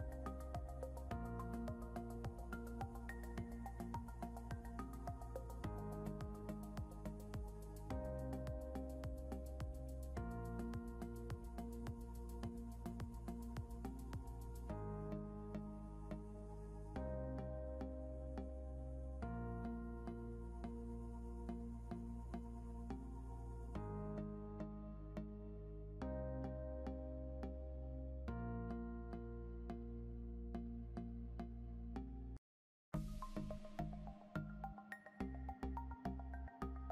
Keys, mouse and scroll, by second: 5.5 click, 8.7 ctrl+c, 9.3 alt+Tab, 10.3 click, 12.4 ctrl+a, 12.9 ctrl+v, 14.5 click, 20.1 click, 24.4 click, 24.9 scroll up 2, 25.2 click, 29.5 click, 32.8 click, 35.9 right click.